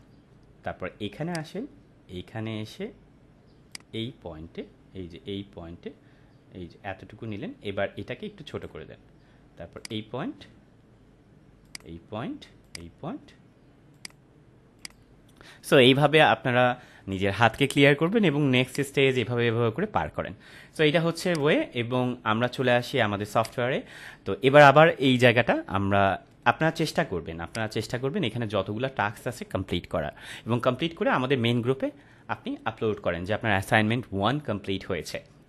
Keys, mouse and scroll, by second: 3.7-8.6 drag, 18.7 click, 21.4 click, 27.4 click.